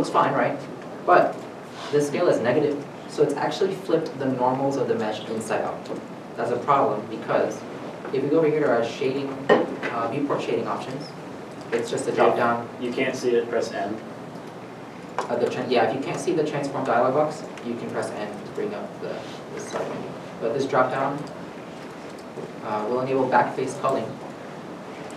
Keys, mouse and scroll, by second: 16.1 n, 17.1 n, 18.3 n, 18.7 n, 19.6 n.